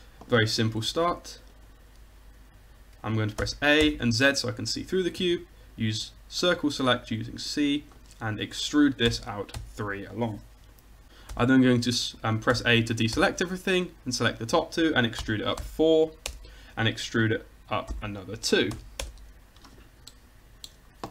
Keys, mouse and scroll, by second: 0.9 c, 3.4 a, 3.8 z, 5.2 c, 9.1 e, 11.4 c, 12.6 a, 13.2 c, 14.3-16.3 drag, 15.3 e, 17.9 e.